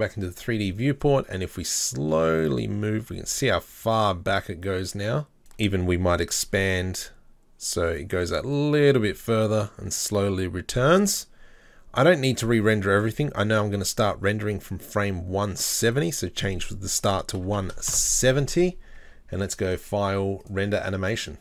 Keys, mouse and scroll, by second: 0.0-4.4 drag, 5.4 right click, 6.4 g, 8.5-21.4 drag.